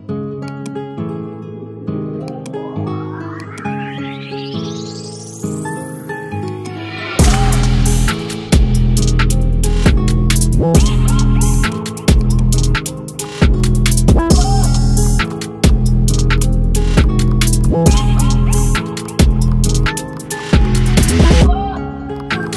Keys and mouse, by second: 14.2 click, 15.0 click, 17.2 click, 18.6 click.